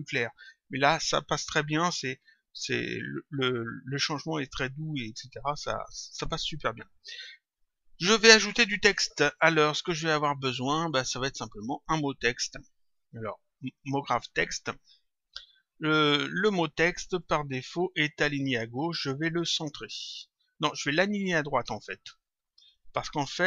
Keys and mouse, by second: 4.4 click, 6.1 click, 11.4 click, 13.5 click, 16.3 click, 19.0 click, 22.5 click.